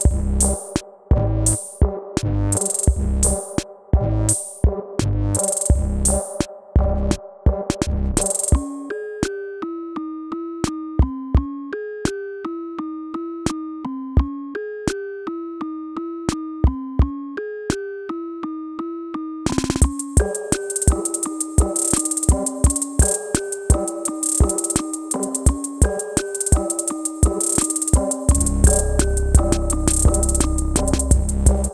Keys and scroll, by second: 0.0 BackSpace.